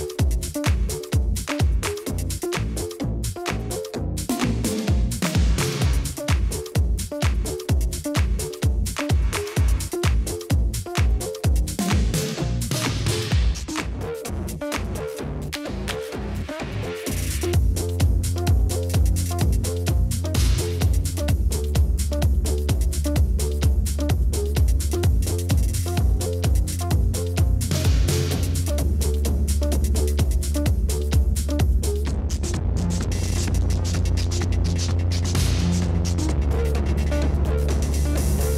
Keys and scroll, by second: 10.5 BackSpace, 13.6-14.0 typing, 23.7-24.5 typing, 26.5 ctrl+z, 34.8-38.5 typing.